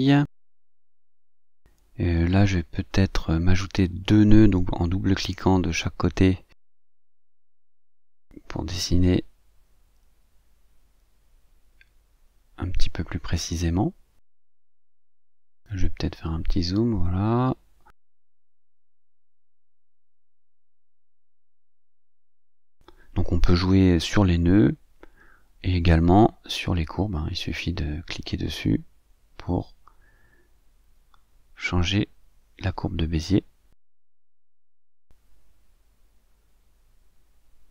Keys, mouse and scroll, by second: 1.9 click, 3.1 click, 3.9-5.7 drag, 6.2-8.2 drag, 9.8-10.8 drag, 11.3-12.5 drag, 13.3-14.0 ctrl+scroll up 4, 15.0-16.5 drag, 17.3-18.6 drag, 19.5-21.1 drag, 21.7-22.9 drag, 24.1-26.1 drag, 26.9-28.7 drag, 30.9-32.7 drag, 33.0 click, 34.3-36.1 drag, 36.9 click.